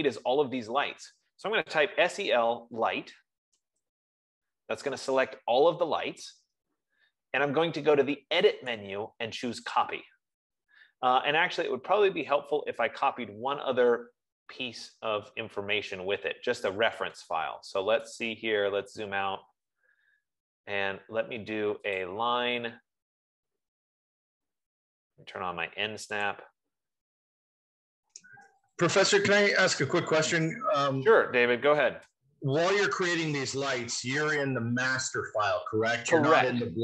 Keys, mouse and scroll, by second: 1.9 F15, 2.3-3.2 typing, 4.1 Return, 9.2 click, 10.0 click, 14.5 Escape, 16.4-17.0 scroll, 19.2 right click, 19.9 scroll, 20.7 scroll, 22.6 click, 26.7 click, 29.2 click, 31.7 click, 32.6 Return, 34.6 shift+click, 36.2 shift+click.